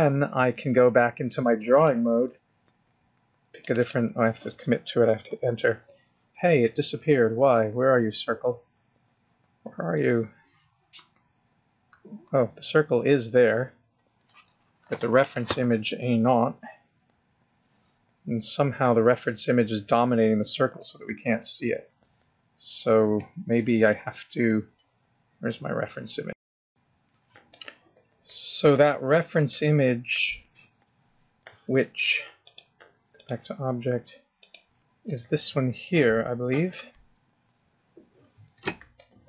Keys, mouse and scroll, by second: 8.8 middle click, 12.2 middle click, 16.8 click, 18.1 KP_0, 20.8-21.1 scroll down 4, 21.6 middle click, 21.6 scroll up 1, 27.5 middle click, 32.4 click, 34.4 click, 35.1 middle click, 37.2 KP_0, 38.4-38.9 scroll down 3, 39.0 middle click.